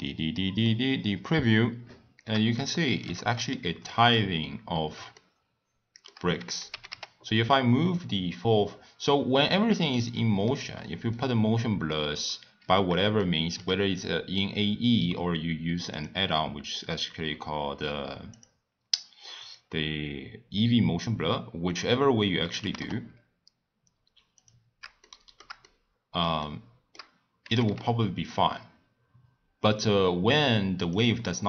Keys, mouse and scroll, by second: 0.6-6.7 middle drag, 6.7 g, 10.5-14.5 middle drag, 14.5 scroll up 1, 15.9-18.4 drag, 19.4-20.4 drag, 20.4-22.6 scroll down 2, 22.6 g, 25.0-27.5 shift+middle drag, 27.5 g.